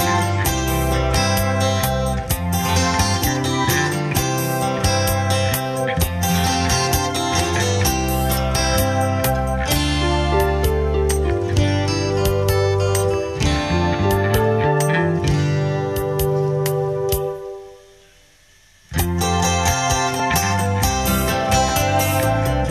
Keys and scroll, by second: 12.3 alt+Delete, 15.2 ctrl+d.